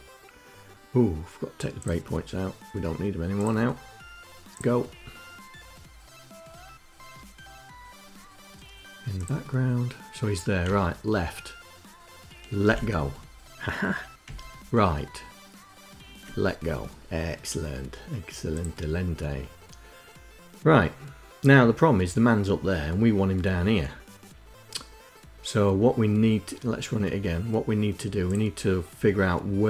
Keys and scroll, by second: 10.3 Right, 14.0 Left.